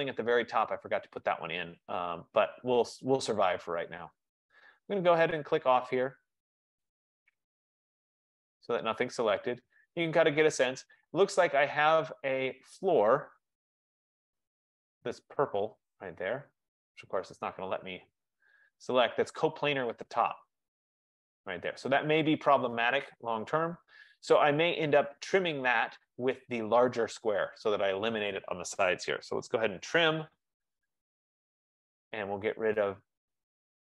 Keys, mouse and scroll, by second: 5.7 click, 6.8 click, 8.3 click, 9.1 click, 11.7 click, 13.2 click, 14.4 click, 16.1 click, 19.0-20.9 scroll, 22.1 click, 26.7 click, 29.2-31.4 typing, 31.5 click, 33.0 click.